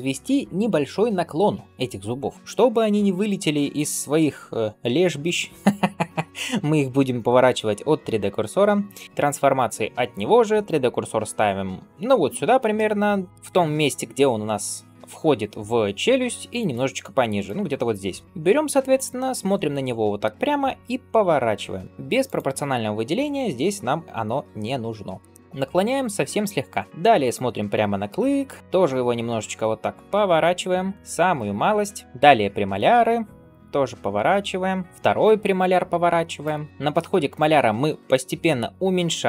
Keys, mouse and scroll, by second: 3.6 shift+right click, 12.6 middle click, 16.4 shift+right click, 18.9-20.1 middle drag, 21.0 r, 22.1 click, 25.1 r, 26.9 shift+middle click, 27.1 click, 27.9 l, 28.6 shift+right click, 29.1 r, 32.0 click, 32.5 l, 33.5 r, 36.3 shift+right click.